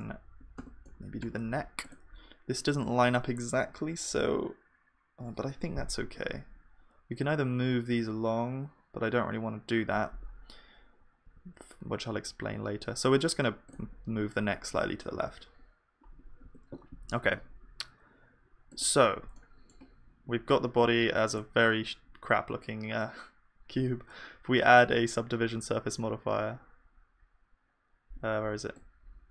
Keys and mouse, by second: 0.6 Tab, 0.8-3.8 middle drag, 6.1 KP_1, 11.3 e, 16.5 Tab, 16.5 click.